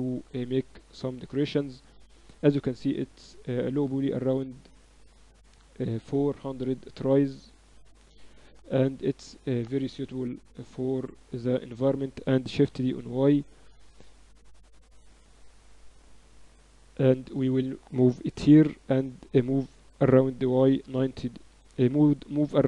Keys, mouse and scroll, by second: 0.8 Tab, 8.2 KP_Divide, 9.9 KP_7, 12.5 shift+d, 15.2 ctrl+z, 15.9-17.7 drag, 18.1 shift+d, 19.7 r, 21.6 ctrl+z, 22.2 r.